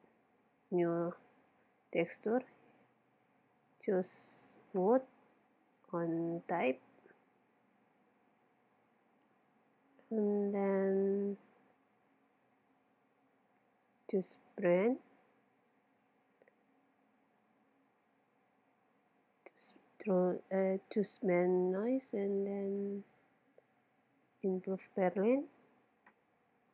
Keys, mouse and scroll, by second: 8.8-10.6 drag, 14.6-16.3 drag, 17.3-19.1 drag, 22.7-24.5 drag.